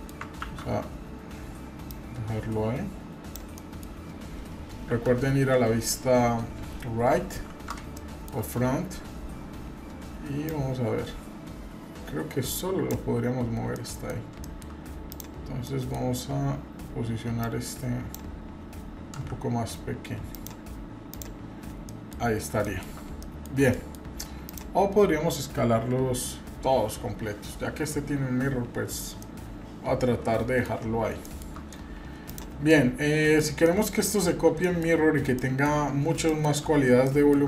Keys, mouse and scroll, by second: 0.5 ctrl+z, 1.8-3.3 drag, 3.6 middle click, 4.8 KP_3, 5.6 KP_1, 6.3-7.4 scroll up 4, 7.9-8.4 shift+middle drag, 8.8-9.2 scroll up 1, 10.5-13.0 drag, 13.2-13.5 scroll down 2, 13.7-14.1 middle drag, 14.2 scroll down 1, 14.4 shift+middle drag, 14.6 shift+scroll up 1, 15.1 click, 15.6 middle click, 16.0-16.6 scroll up 1, 17.4 click, 19.2 s, 21.1 drag, 21.6-21.9 scroll down 2, 21.9 middle drag, 22.3 scroll up 2, 22.6 shift+middle drag, 23.2 middle drag, 23.7 middle click, 24.4 drag, 29.2-30.6 middle drag, 30.8 scroll up 1, 31.2-31.5 shift+middle drag, 32.2 click, 32.7-33.4 middle drag, 33.6 middle click, 34.2 scroll up 1, 34.6 shift+middle click, 34.9-35.3 scroll up 2, 35.4 shift+middle click, 35.8-36.1 scroll up 1, 36.2 shift+middle click, 37.0 shift+middle click.